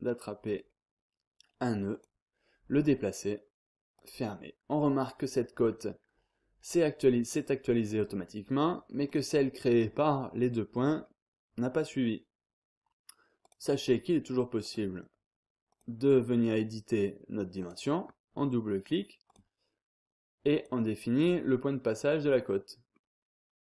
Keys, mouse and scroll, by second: 0.0-0.6 scroll down 1, 0.6-1.2 scroll up 1, 1.9 click, 3.9 click, 9.0 click, 10.9 scroll down 1, 11.2-11.9 scroll up 1, 13.4 click, 14.6 click, 15.7 click, 17.6 click, 19.3 click, 20.5 click, 22.0-22.6 scroll up 1, 22.6 scroll down 1, 22.9-23.5 scroll up 1.